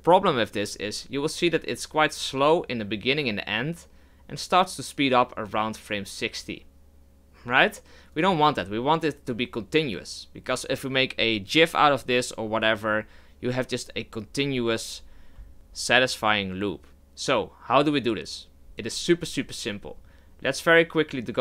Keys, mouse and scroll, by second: 8.1-11.3 drag.